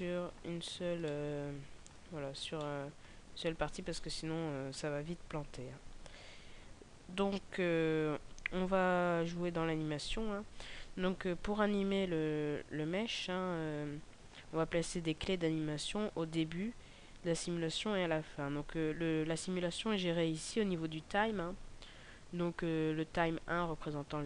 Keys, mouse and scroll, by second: 0.5-0.8 scroll up 2, 1.0 shift+middle click, 2.2 scroll up 1, 2.5 shift+middle click, 3.1-3.9 scroll down 1, 3.9 shift+middle click, 12.4-13.1 scroll up 1, 13.1 middle click.